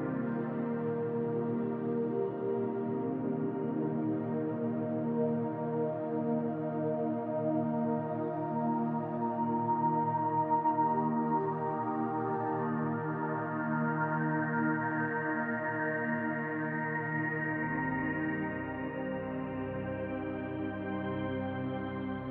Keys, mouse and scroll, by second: 0.5 click, 0.7 scroll up 1, 1.4-4.6 drag, 4.6-12.7 middle drag, 6.0 scroll down 2, 11.6-12.7 scroll down 2, 12.7 click, 13.1-13.5 scroll up 1, 14.3-22.3 middle drag, 19.7 l, 21.4 x.